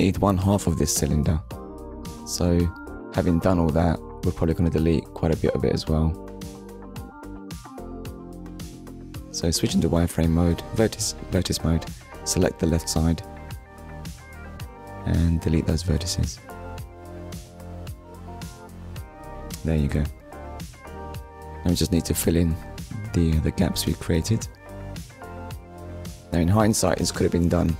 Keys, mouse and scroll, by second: 1.8 click, 3.0 middle click, 3.5 click, 4.1 Tab, 4.7 middle click, 7.1 KP_1, 8.8 click, 10.1 click, 10.6 click, 11.2-11.7 scroll up 1, 11.7 click, 14.8 middle click, 16.9 Delete, 17.8 click, 18.9 click, 19.6 middle click, 25.7 click.